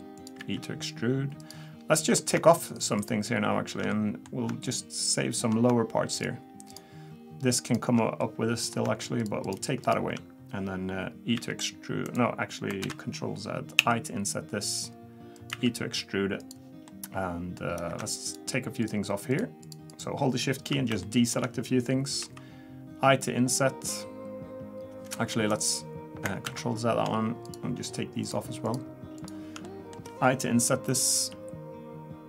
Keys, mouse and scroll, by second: 0.4 e, 1.9 middle click, 2.7 shift+click, 3.0 shift+click, 3.9 middle click, 4.6 shift+click, 6.2 shift+click, 8.2 middle click, 9.2 shift+click, 9.4 shift+click, 11.3 e, 12.8 ctrl+z, 13.8 i, 15.5 e, 18.0 middle click, 18.2 shift+click, 18.8 shift+click, 19.9 shift+click, 21.0 shift+middle click, 22.2 i, 26.5 ctrl+z, 27.5 shift+click, 28.2 shift+click, 29.5 shift+click, 29.6 middle click, 31.1 o.